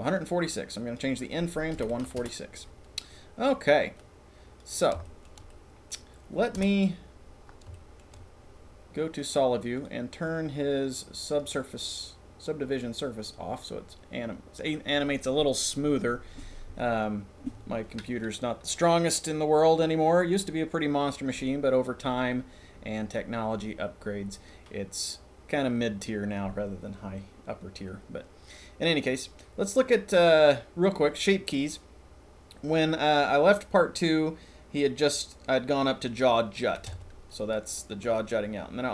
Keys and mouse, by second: 0.9-2.3 drag, 3.9 click, 4.5-5.9 middle drag, 6.5 KP_0, 7.7 shift+middle drag, 8.1 middle click, 9.1 middle click, 11.3 click, 37.0 Tab, 37.3 middle click.